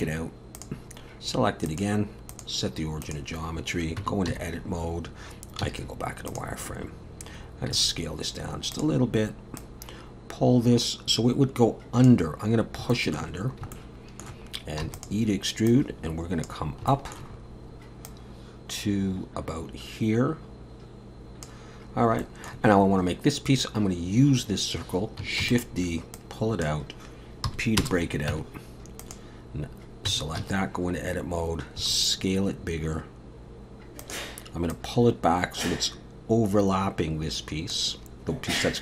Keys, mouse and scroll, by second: 0.0 Tab, 0.6 click, 1.7 click, 3.4-4.0 scroll up 2, 4.0 Tab, 4.0 scroll up 1, 4.3 a, 4.7-5.6 scroll down 2, 5.6 z, 7.8 s, 9.6 click, 12.9 shift+middle click, 13.3-13.6 scroll down 4, 13.7 shift+middle click, 14.8 e, 15.7 click, 16.7 scroll down 1, 16.9 shift+middle click, 17.3-17.9 scroll up 2, 18.1 click, 21.9 scroll up 2, 22.2 shift+middle click, 25.4 shift+d, 26.2 click, 27.5 p, 28.3 Tab, 29.0 click, 30.1 Tab, 30.4 a, 31.8 s, 34.7 click.